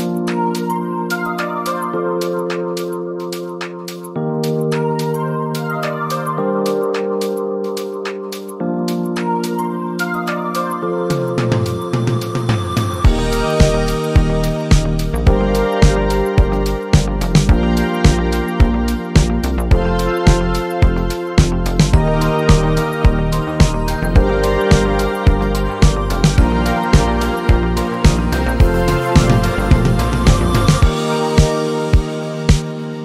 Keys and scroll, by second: 0.0-2.5 typing, 31.1 BackSpace, 31.3 p, 31.7 BackSpace, 31.8 p.